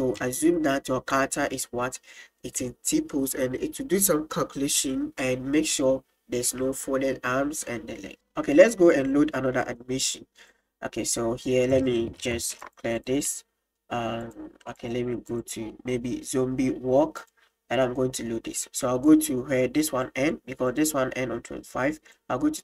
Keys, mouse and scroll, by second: 6.6 click, 8.1 space, 11.7 click, 13.0 click, 13.3-14.2 drag, 14.3-14.8 drag, 15.4-17.3 drag, 19.2-22.6 drag.